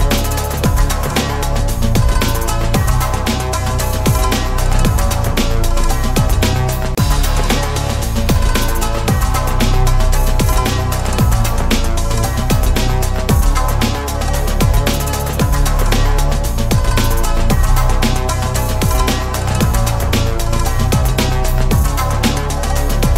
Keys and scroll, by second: 2.4 alt+Tab.